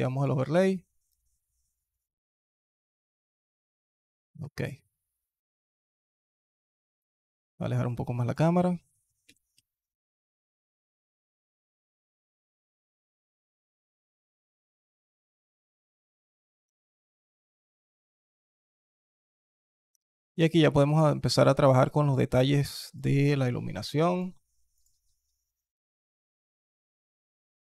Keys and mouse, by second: 4.2 middle click, 6.6-7.2 alt+drag, 9.1 g, 12.3 alt+click, 12.6 click, 13.3 alt+drag, 14.1-14.8 alt+drag, 16.1 alt+drag, 16.5 s, 19.8 click, 20.1 alt+click, 20.7 alt+click, 21.1 alt+click, 24.0 drag.